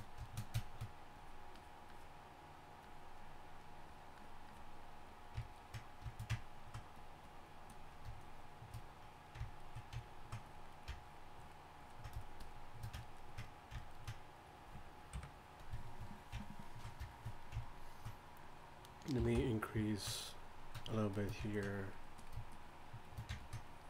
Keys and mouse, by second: 15.1 KP_1.